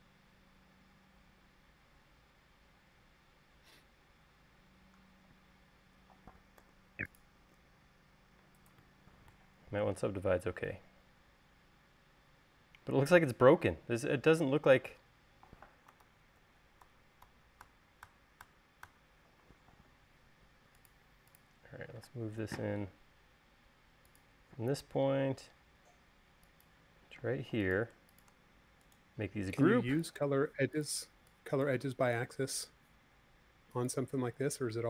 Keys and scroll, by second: 3.4 l, 5.8 space, 7.1 u, 16.6 super+z, 22.5 m, 27.8 space.